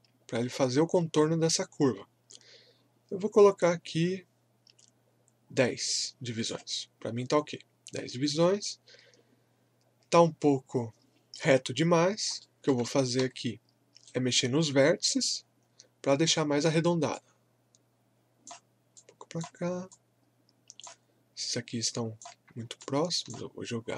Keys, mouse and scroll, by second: 11.9 scroll up 1, 12.4 alt+middle click, 13.2 w, 14.0-15.4 right drag, 15.4-15.8 scroll up 1, 16.2-22.8 drag, 22.8-23.9 shift+drag.